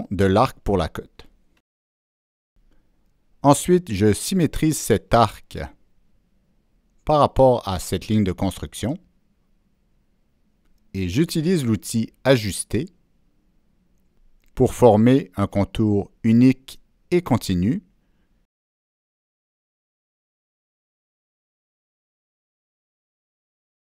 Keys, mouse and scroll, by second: 3.4-3.9 right drag, 3.5 ctrl+middle click, 4.8 middle drag, 7.3 Escape, 8.2 Escape, 8.2 click, 10.2 click, 11.1 click, 11.8 click, 12.7 click, 13.8-14.1 right drag, 14.6-15.1 drag, 15.5-16.0 drag, 16.6-17.1 drag, 17.6 click, 18.3 click, 19.0-19.6 drag, 20.2 click, 21.9-22.6 drag, 23.0 click.